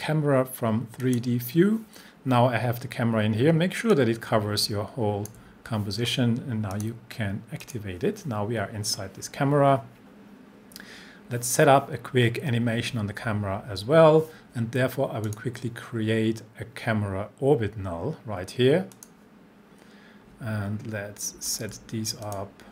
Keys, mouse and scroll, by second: 1.0 click, 3.9-5.5 drag, 15.2 click, 18.9 click, 21.5 shift+click, 22.2-22.7 drag.